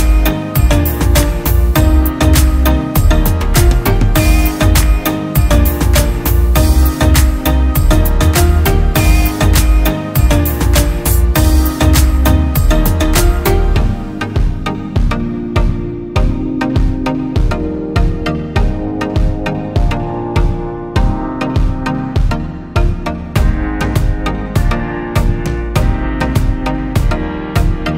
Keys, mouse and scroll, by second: 2.0 alt+scroll up 1, 9.3-10.2 typing, 15.9-17.7 typing, 18.9-19.8 typing, 21.5-23.9 typing, 22.2 double click, 26.9 double click.